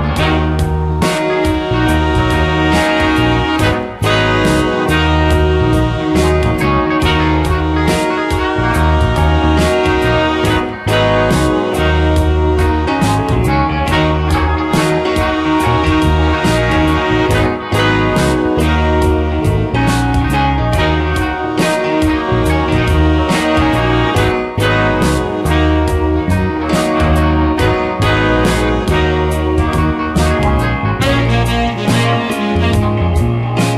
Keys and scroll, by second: 0.3 space, 3.5 space, 11.0 ctrl+z, 13.0 space, 22.3 space, 31.1 ctrl+z.